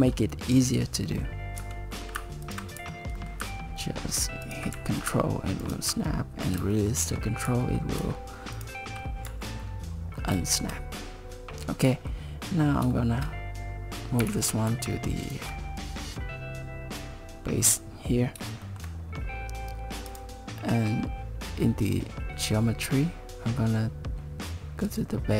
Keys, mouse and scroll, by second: 1.6 e, 2.8 e, 4.8 e, 6.1-6.9 scroll down 5, 6.7 shift+middle click, 7.5 e, 9.3 Tab, 9.6 middle click, 10.5 shift+middle click, 11.0 scroll down 3, 11.9 middle click, 12.5 scroll up 3, 12.9 shift+middle click, 14.2 g, 18.6 shift+middle click, 20.1 click, 22.5-24.8 scroll down 1, 24.8 scroll down 1, 24.9 click.